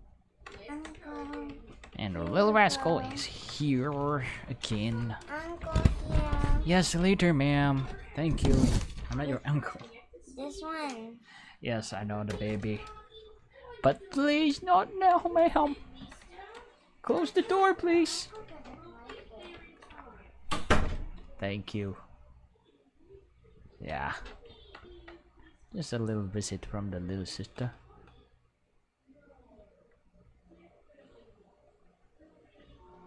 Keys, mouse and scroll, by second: 2.0 ctrl+middle click, 18.8 ctrl+middle click, 19.3 ctrl+shift+middle click, 21.6-23.7 drag, 25.8-27.5 drag, 28.5 click, 30.3 click, 31.9 click.